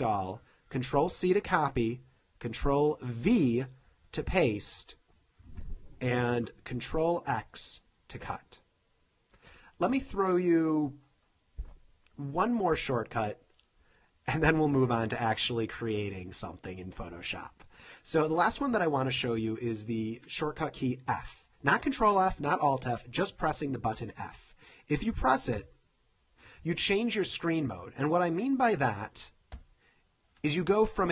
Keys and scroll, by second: 1.1 super+c, 3.3 super+v, 6.5 super+a, 7.3 super+x, 25.7 f, 29.6 f.